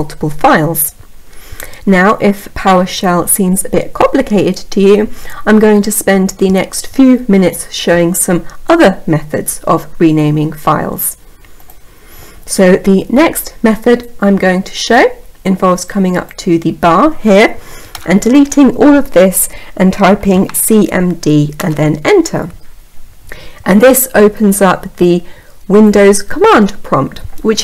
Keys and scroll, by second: 20.9 Return.